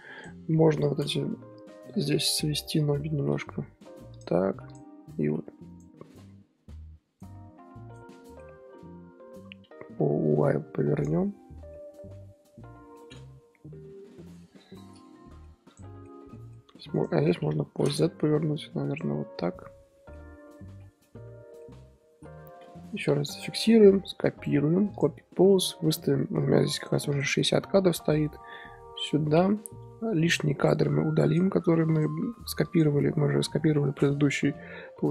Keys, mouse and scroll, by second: 0.1 click, 1.5-2.1 middle drag, 2.1-2.7 scroll down 4, 2.7 KP_7, 3.0-3.6 scroll up 5, 3.6 r, 4.7 click, 5.2 r, 6.1 r, 7.4 r, 8.1 middle click, 8.4 r, 11.1-15.7 middle drag, 15.7 click, 15.9-16.7 middle drag, 16.7 r, 17.5 KP_7, 18.2 r, 19.6-20.4 middle drag, 20.4-20.7 scroll up 2, 20.7 scroll down 5, 21.0 scroll up 1, 21.0-22.1 middle drag, 22.1 a, 23.0 i, 24.4-27.1 right drag, 27.1-27.7 drag, 27.7 ctrl+v, 29.3 i, 30.3 click, 30.6 click, 31.5 x, 32.6 click, 33.6 scroll down 1, 33.7-35.1 middle drag.